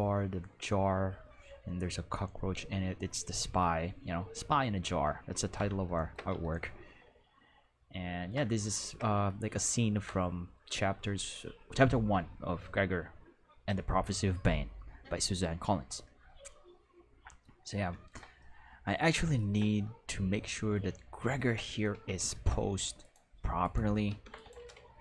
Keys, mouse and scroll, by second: 5.0-6.1 ctrl+middle drag, 6.6-8.3 ctrl+middle drag, 9.3 ctrl+middle click, 18.4-19.5 middle drag, 19.8-21.3 middle drag, 21.9 q, 23.0 right click, 23.6 right click, 24.1 ctrl+Tab, 24.4 right click, 24.9 r.